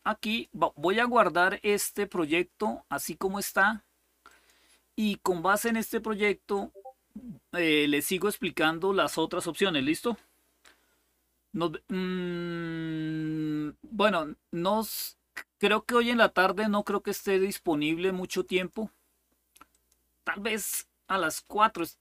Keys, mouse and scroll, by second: 0.0 click, 4.0 click, 5.3 click, 7.3 scroll down 1, 7.9-8.6 scroll down 4, 16.2 click, 16.6 click, 18.1 click, 19.4 click, 19.9 click.